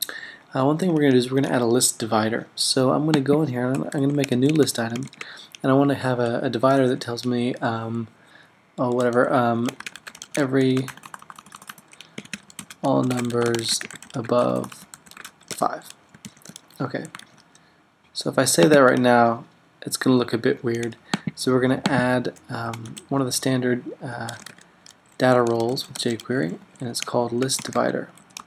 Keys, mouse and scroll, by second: 3.9 Return, 4.2-5.8 typing, 9.6-17.1 typing, 17.3 super+s, 18.4-19.2 typing, 22.6 Left, 22.8 typing, 24.2-28.4 typing.